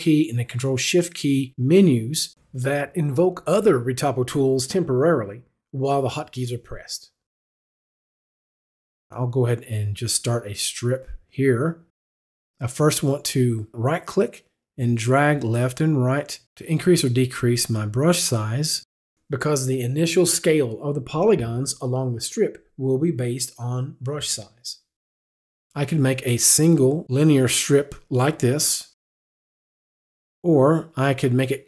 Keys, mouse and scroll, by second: 1.5 click, 7.6 click, 8.3 click, 15.5 right click, 26.0 click.